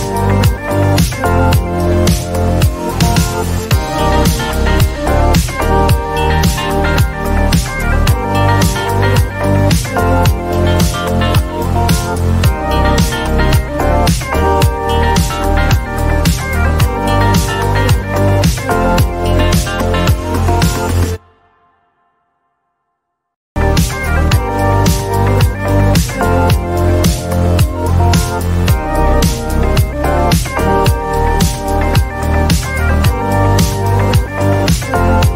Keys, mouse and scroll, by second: 0.7-2.6 typing, 4.3 click, 7.3 click, 7.5-8.4 typing, 9.1 click, 10.9 click, 11.5 typing, 12.9-13.6 typing, 16.3 click, 16.9 click, 21.5 click, 21.8 alt+click, 27.1 BackSpace, 29.5 v, 31.0 click, 32.7-34.2 typing.